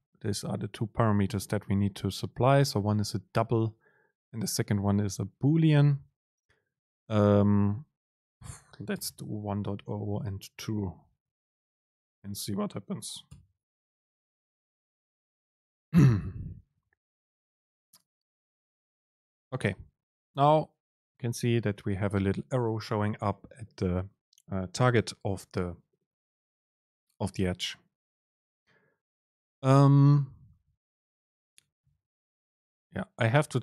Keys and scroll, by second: 11.2 BackSpace, 13.4 ctrl+shift+super+F9.